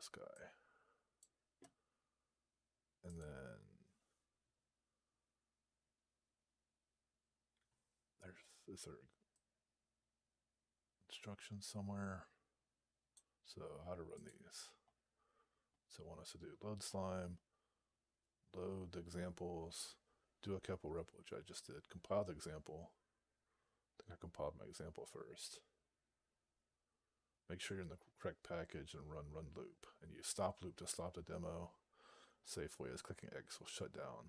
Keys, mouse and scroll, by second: 2.9 click.